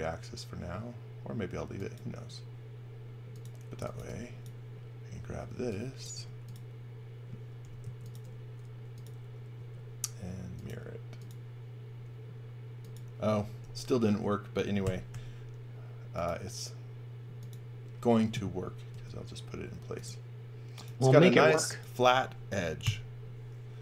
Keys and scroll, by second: 3.5-4.4 typing, 5.5 e, 6.1 space, 7.6 m, 9.5 s, 13.6 m, 14.8 g, 15.1 m, 18.9 r, 22.8-23.8 typing.